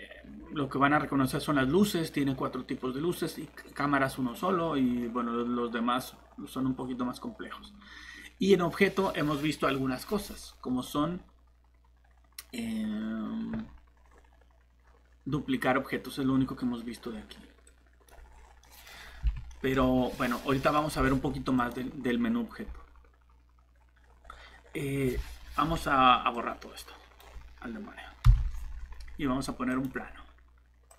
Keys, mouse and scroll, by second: 18.2 Delete, 18.2 click, 18.3 scroll up 1, 18.6 middle click, 18.9 scroll up 1, 19.5 middle click, 20.1 click, 20.6 middle click, 21.6 click, 24.2 scroll down 1, 24.6 scroll up 1, 25.7-26.3 scroll down 1, 26.3 click, 28.2 shift+Delete.